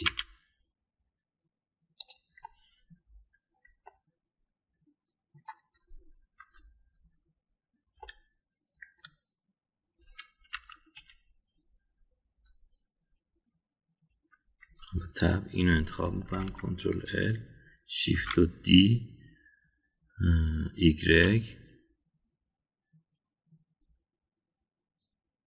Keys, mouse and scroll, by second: 1.0 e, 3.4-4.6 middle drag, 4.9-6.3 middle drag, 6.7 Tab, 7.8 Tab, 8.9-10.0 middle drag, 11.5 KP_1, 11.9 KP_3, 15.6 Tab, 16.2 click, 17.2 ctrl+l, 19.1 shift+d.